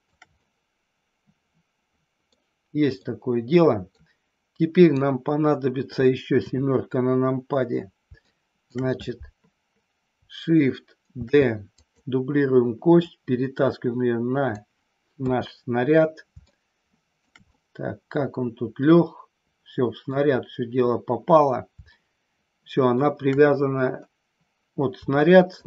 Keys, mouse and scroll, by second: 0.2-2.2 middle drag, 3.0-4.0 middle drag, 4.8 click, 6.4 KP_7, 8.2 shift+middle click, 11.1 shift+d, 11.8 click, 13.0-14.5 drag, 15.1 KP_3, 16.5 shift+middle click, 17.5-20.1 middle drag, 21.8 scroll up 1, 22.0 shift+middle click, 25.1 scroll up 1, 25.2 shift+middle click.